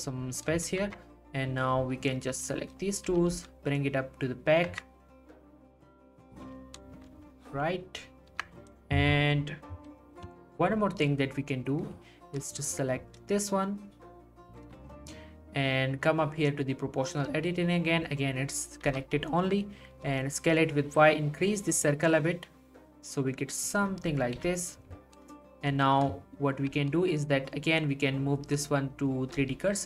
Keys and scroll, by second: 0.8 Tab, 3.1 g, 3.3 y, 4.7 Tab, 8.3 Tab, 19.9 y, 24.4 3, 29.3 r.